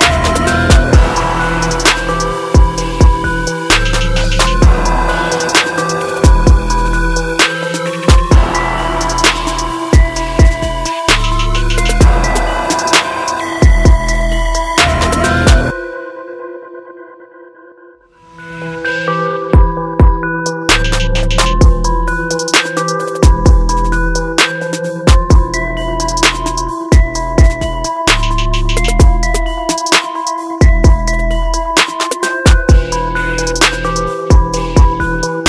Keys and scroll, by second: 2.9 ctrl+t, 14.9 ctrl+-, 20.9 ctrl+alt+z, 21.5 ctrl+j, 23.3 ctrl+t, 29.5 ctrl+t.